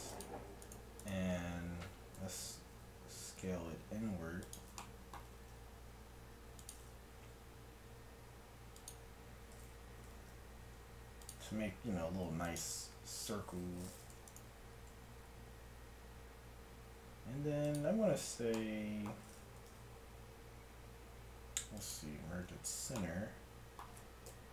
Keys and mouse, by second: 2.3 e, 5.3 g, 7.3 s, 10.0 g, 12.3 ctrl+r, 15.1 s, 19.7 alt+m, 22.5 Tab, 24.3 KP_1.